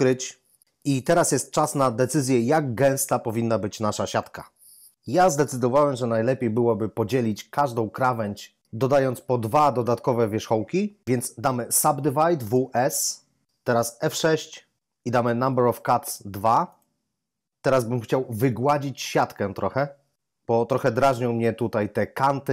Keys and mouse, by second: 12.5 w, 12.7 s, 14.0 F6, 16.6 click.